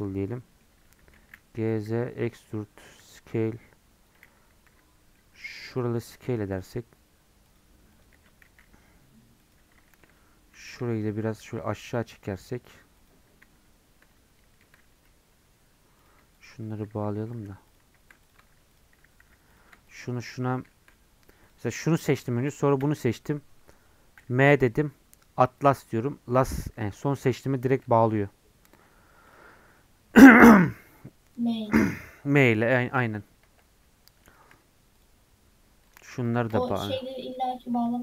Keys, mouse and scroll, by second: 0.0 right click, 0.3 middle click, 0.9 g, 5.1 middle click, 5.4 scroll up 1, 6.0 alt+Left, 7.5 alt+shift+Left, 8.5 s, 9.9 shift+middle click, 10.7 1, 11.0 Left, 11.4 g, 16.1 click, 17.3 j, 17.7 click, 18.3 click, 18.8 shift+click, 19.2 j, 19.6 click, 20.7 shift+middle click, 21.0 scroll up 2, 21.5 click, 25.7 m, 27.5 scroll down 1, 27.8 Tab, 28.3 scroll down 1, 29.3-33.4 drag, 33.4 Tab, 33.7 scroll up 2, 35.0 click, 35.9 click, 36.4 shift+click, 37.1 k.